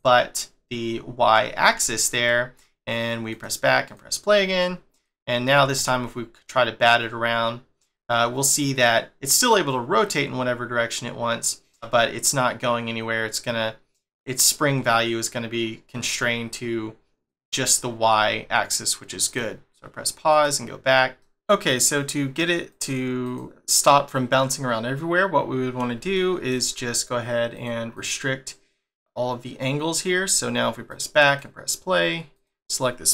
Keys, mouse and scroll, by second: 1.9 shift+middle click, 3.3 click, 3.8 click, 4.9 click, 5.6 g, 19.2 click, 20.3 click, 21.2 middle click, 21.3 click, 22.7 click, 23.2 click, 23.5 middle click, 26.1 shift+middle click, 27.5 click, 27.9 click, 29.1 click, 30.9 click, 31.2 click, 32.4 click.